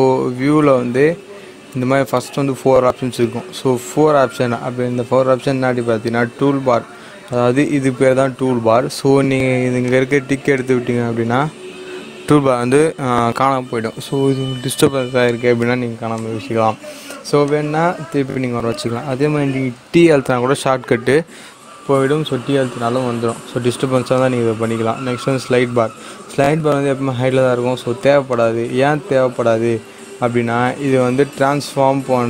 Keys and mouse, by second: 9.8 click, 16.1 click, 19.9 t, 24.2 click, 28.2 click.